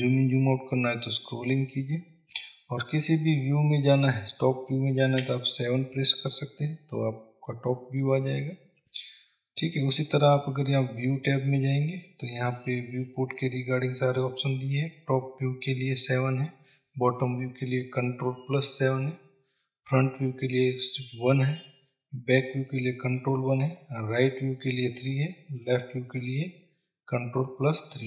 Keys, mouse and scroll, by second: 0.4-1.0 scroll up 2, 1.3 scroll down 1, 2.0 scroll up 2, 2.6-3.0 scroll down 2, 3.0-3.9 scroll up 2, 5.6 KP_7, 7.1 scroll down 2, 11.5-28.0 drag.